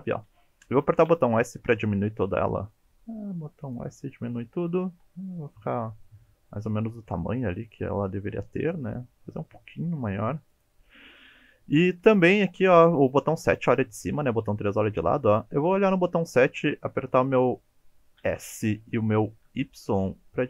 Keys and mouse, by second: 1.1 s, 3.7 click, 5.0 s, 10.5 click, 12.2 KP_7, 14.2 KP_3, 15.7 KP_7, 18.2 s, 19.5 y.